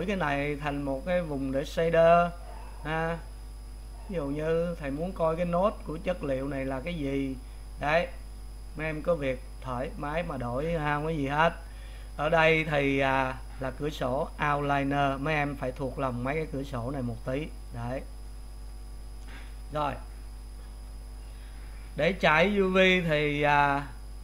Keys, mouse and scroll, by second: 2.1-17.3 drag, 19.8-24.2 drag.